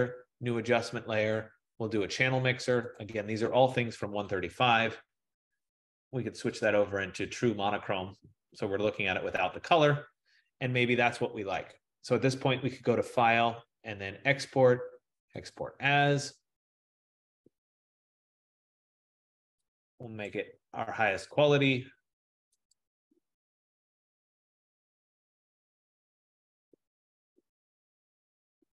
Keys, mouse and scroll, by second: 3.0 click, 4.4 click, 6.7 click, 15.6 click, 20.4 click, 22.8 click, 27.1 click.